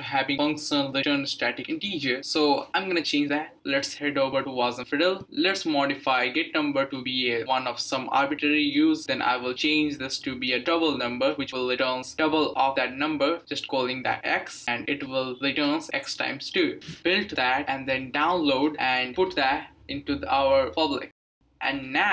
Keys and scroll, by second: 7.0-8.7 typing, 10.5 Right, 10.7 Right, 12.3-16.4 typing, 15.9 Delete.